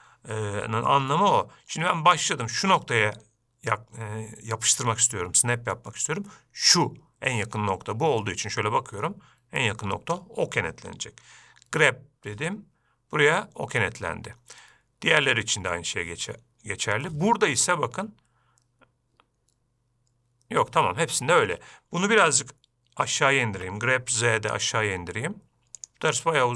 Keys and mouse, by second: 8.6-10.6 middle drag, 12.1 g, 24.0 g.